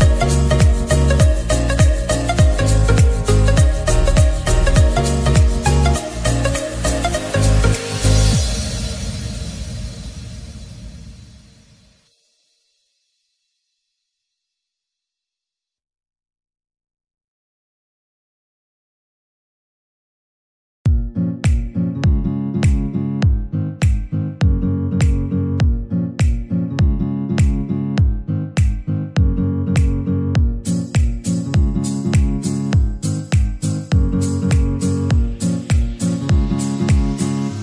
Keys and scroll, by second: 7.2 ctrl+z.